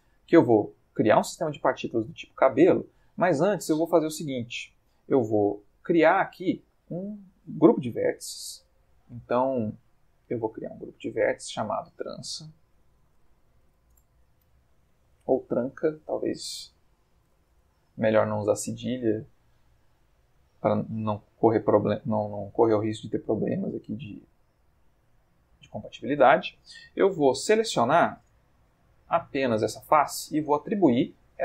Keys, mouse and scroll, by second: 0.5 click, 5.5 click, 7.8 Tab, 10.3 click, 11.2 click, 12.2-13.7 typing, 13.9 Return, 15.6 click, 16.6-17.3 typing, 17.5 Return, 18.8-22.7 middle drag, 22.8-26.0 ctrl+middle drag, 26.1 middle click, 27.0 F3, 27.8 Escape, 28.7 3, 29.0 click, 29.5 middle click.